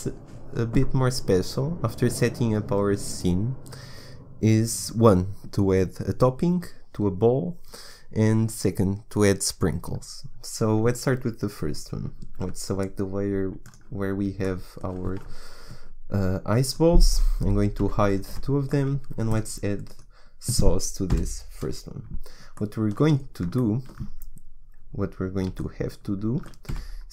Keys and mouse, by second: 14.5 click, 14.8 middle click, 17.8 h, 18.3 h, 19.2-21.1 middle drag, 21.1 KP_1, 26.7 a.